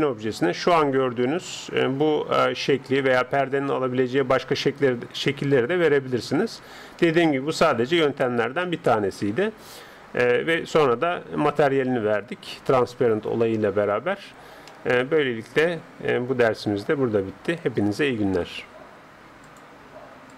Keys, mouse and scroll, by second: 0.7-5.5 middle drag, 7.0-10.3 middle drag, 14.7-16.4 middle drag.